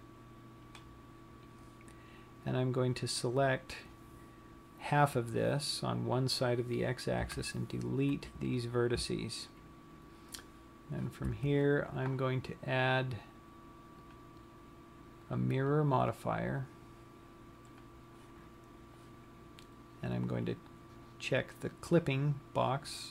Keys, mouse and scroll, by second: 8.0 Delete, 11.9 Tab, 14.4 click, 16.0 click, 22.7 click.